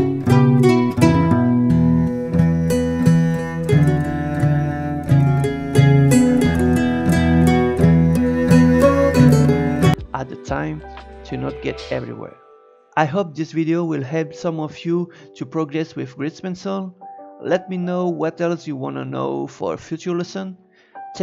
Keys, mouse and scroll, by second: 1.0 space, 2.6-5.5 shift+middle drag, 11.6 click, 12.8 scroll down 2, 12.9 click, 13.2 shift+d, 13.5 Tab, 14.1 click, 14.4 a, 14.6 g, 15.2 click, 15.5 l, 15.6 g, 16.5-17.7 drag, 18.2 click, 19.1 click, 20.2 click, 20.8 Tab, 21.1 click.